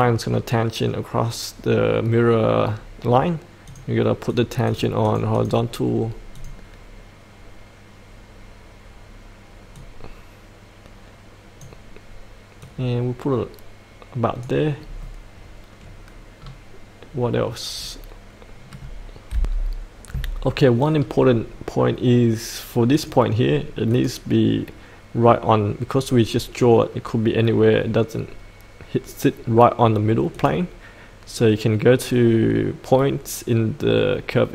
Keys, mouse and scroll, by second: 7.6-14.6 drag, 14.8-16.4 scroll up 1, 16.4-17.2 scroll down 1, 17.2-17.6 scroll up 1, 17.7-19.3 scroll up 1, 19.3 F8, 20.9-21.4 scroll down 1, 21.5-22.9 scroll up 1, 22.9 click.